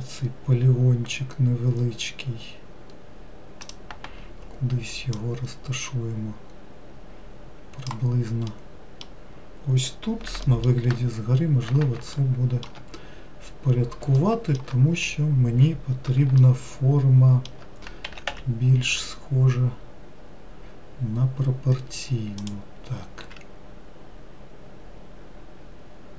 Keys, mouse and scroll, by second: 5.4 click, 8.8-10.7 middle drag, 12.4 shift+middle click, 13.2-13.9 scroll up 2, 14.4 shift+middle click, 15.2-16.6 scroll up 3, 16.6-18.3 shift+middle drag, 18.3 s, 23.5 s.